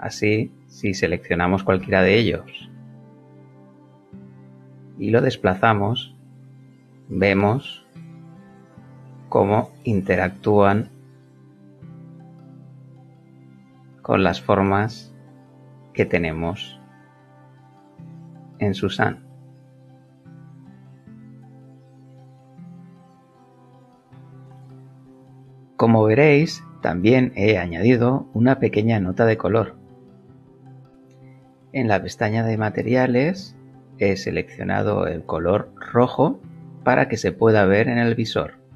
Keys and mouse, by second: 0.5 click, 1.8 g, 2.9 click, 3.7 click, 7.1 click, 8.0 click, 8.4 g, 12.1 click, 12.9 click, 13.5 g, 17.3 click, 18.0 click, 18.5 g, 20.8 click, 23.4 click, 23.9 g, 24.5 click, 25.3 click, 26.4 click, 27.1 click, 28.3 click, 30.9 click, 34.1 click.